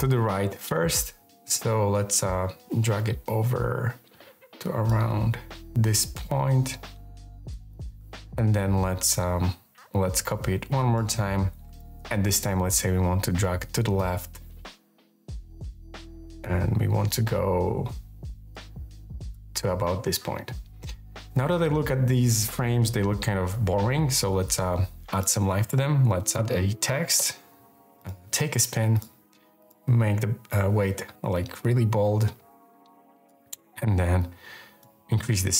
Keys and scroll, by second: 24.5 t, 25.7-27.0 typing, 30.3 k.